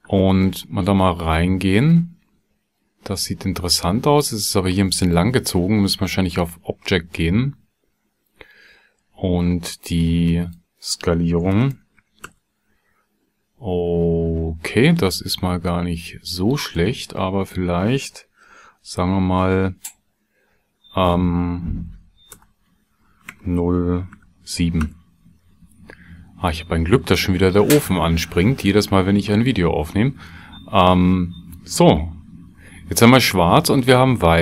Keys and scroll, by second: 11.5 KP_0, 11.7 KP_Decimal, 12.0 KP_1, 12.2 KP_Enter, 22.4 BackSpace, 23.3 KP_0, 24.2 KP_7, 24.8 KP_Enter, 24.9 BackSpace.